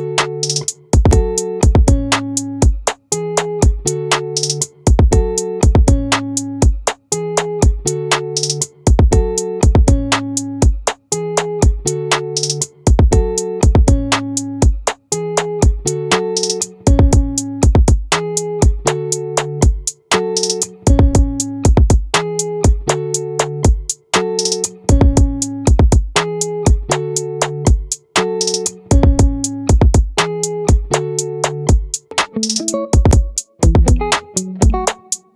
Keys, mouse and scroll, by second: 1.0 ctrl+z, 3.6 e, 6.8-8.6 drag, 8.0 ctrl+z, 12.2-14.0 drag, 18.0-19.4 drag, 19.4 ctrl+z, 24.0-26.0 right drag, 26.0 i.